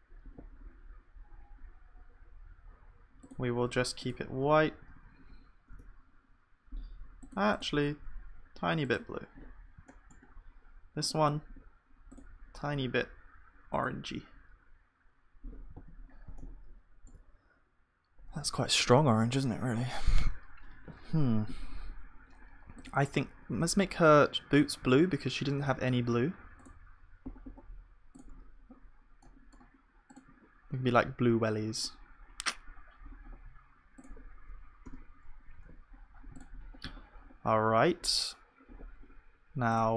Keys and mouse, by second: 4.4 f, 4.7 f, 4.9 f, 5.1 f, 9.5-15.8 middle drag, 15.8 ctrl+s, 16.5-19.1 middle drag, 29.2-35.0 middle drag, 35.0 KP_0, 35.6 ctrl+s, 35.9 middle click.